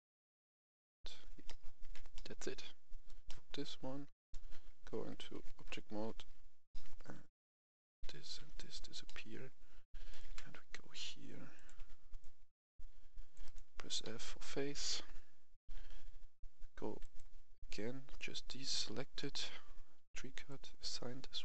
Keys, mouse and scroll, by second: 0.9 click, 1.4 middle click, 1.8 Tab, 2.1 middle click, 2.4 scroll down 1, 3.2 middle click, 4.7 Tab, 6.6 middle click, 7.2 right click, 8.1 right click, 9.0 middle click, 10.1 right click, 10.3 Tab, 11.5 click, 12.2 click, 13.4 right click, 14.0 f, 17.0 click.